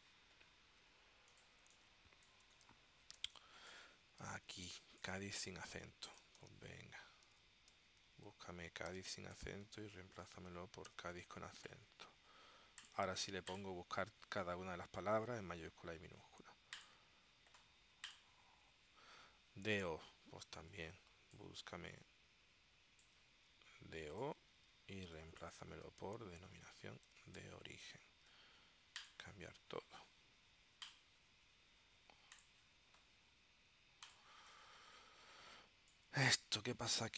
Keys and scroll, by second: 1.8 space, 3.3 space, 4.7 space, 7.4-11.6 typing, 23.5 super+c, 24.7 super+v, 26.0 shift+d, 26.6 •, 27.2 shift+o, 27.5 •, 34.4 space.